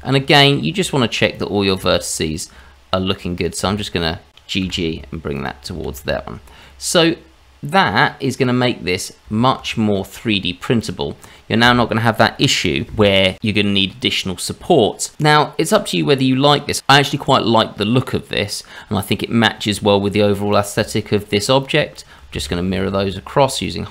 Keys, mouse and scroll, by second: 0.1-0.8 scroll up 1, 1.3 click, 1.9 shift+click, 3.3 click, 3.7 shift+click, 4.3 click, 4.6 g, 5.8 shift+z, 6.1-6.6 scroll down 2, 6.6 middle click, 7.3 scroll down 2, 8.3 click, 8.9-9.2 scroll down 1, 9.2 Tab, 10.4-10.8 scroll down 1, 10.8 click, 11.1-12.3 scroll up 2, 13.8-14.9 scroll up 2, 14.9-15.6 scroll down 1, 15.6-16.5 scroll down 1, 20.5 click, 20.9 shift+click, 21.3 shift+click, 21.6 shift+click, 21.9 shift+click, 22.5 alt+x.